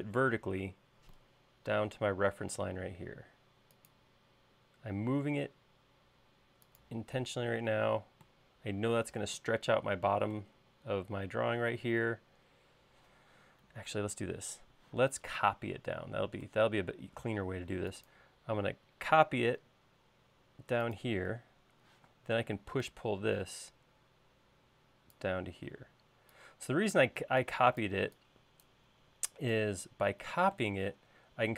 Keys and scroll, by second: 12.0 i, 14.2 super+z, 15.3 m, 22.4 p, 26.0 e.